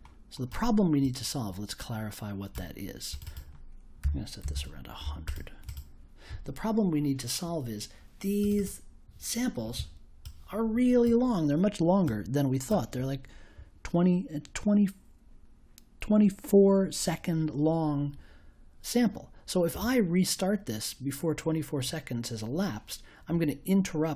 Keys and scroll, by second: 4.0 1, 4.4 0.